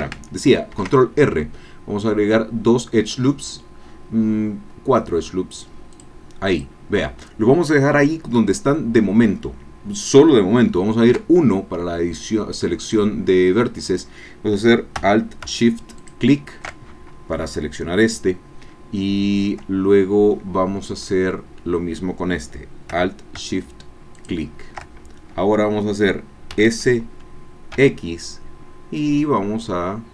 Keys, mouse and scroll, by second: 0.7 ctrl+r, 2.0 scroll up 2, 4.4-5.2 scroll up 4, 6.1 click, 6.7 click, 11.1 1, 12.8 click, 16.2 alt+shift+click, 24.1 alt+shift+click, 26.5 s, 27.7 x.